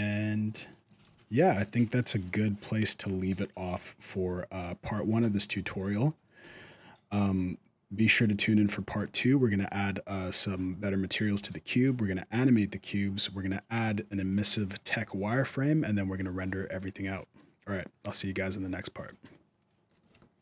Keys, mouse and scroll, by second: 0.4 middle click, 0.5 shift+middle click, 0.8 alt+a, 1.1 middle click, 1.5 scroll down 2, 1.8 shift+middle click, 2.2-2.5 scroll up 3, 2.5 shift+middle click, 7.4-8.0 scroll up 2, 8.0 scroll down 1, 8.4 shift+middle click.